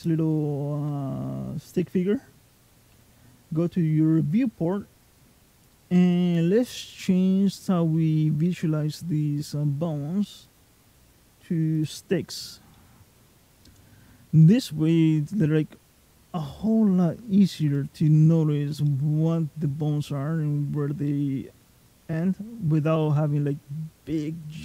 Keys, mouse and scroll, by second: 4.9 click, 10.2 click, 12.5 middle click, 16.3 middle click, 17.4 click, 17.9 middle click, 18.7 middle click, 20.9 middle click, 23.0 middle click, 23.7-24.3 scroll down 3, 24.3 middle click.